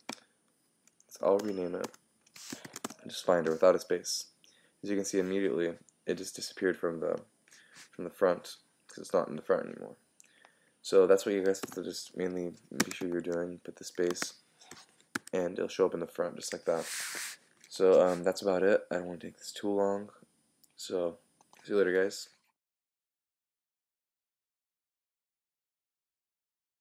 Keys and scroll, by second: 0.1 Right, 0.5 Left, 4.9 Return, 11.6 Return, 12.2 Left, 13.0 Return, 15.1 super+w.